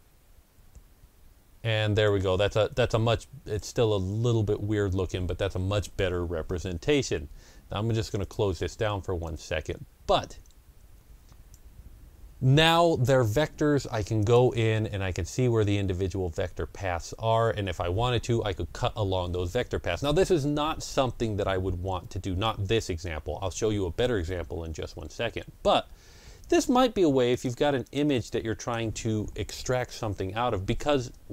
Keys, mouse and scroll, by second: 1.9 Return, 1.9-8.1 drag, 8.4-13.9 drag, 16.3-26.3 drag, 27.9 click.